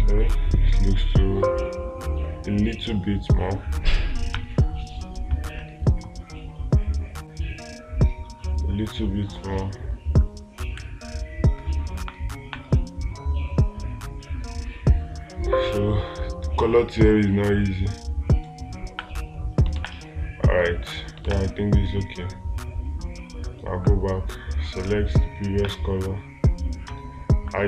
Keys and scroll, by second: 6.3 ctrl+z, 20.2 space, 21.7 space.